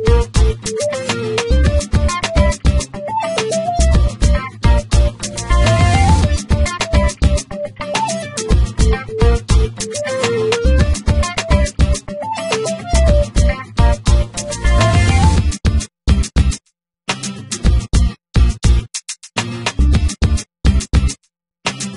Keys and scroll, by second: 2.2 s, 7.1 r, 12.0 g, 13.0 z, 15.1 g, 15.3 y, 17.1 g, 17.3 x, 20.7 s, 21.3 x.